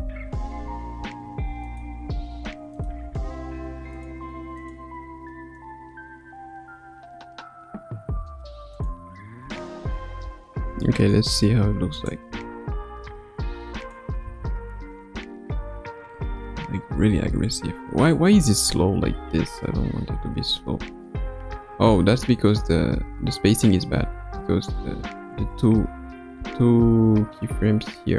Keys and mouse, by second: 1.7 r, 2.7 click, 3.3 r, 5.0 r, 9.4 a, 10.7 i, 12.0 click, 12.3 space, 12.9 space, 13.8 click, 14.2 space, 17.1 space, 18.4-28.1 drag.